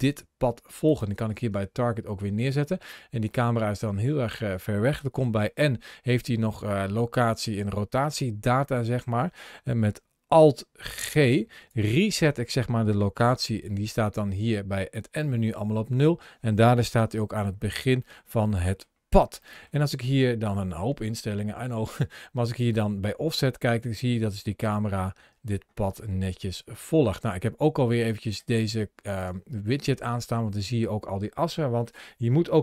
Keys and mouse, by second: 3.1-4.4 middle drag, 5.1 n, 8.3 n, 11.0 alt+g, 13.1 n, 15.4 n, 16.7 KP_Decimal, 17.9 middle click, 18.5 middle click, 19.3 shift+middle click, 21.8-28.1 drag, 29.0 click, 30.0-31.7 middle drag.